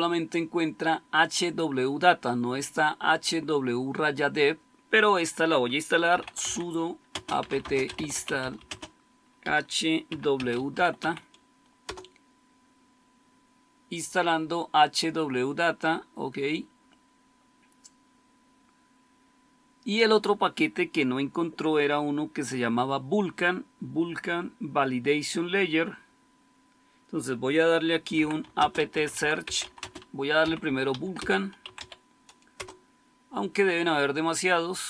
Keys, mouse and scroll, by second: 5.8-12.2 typing, 27.8-32.2 typing, 32.5 Return.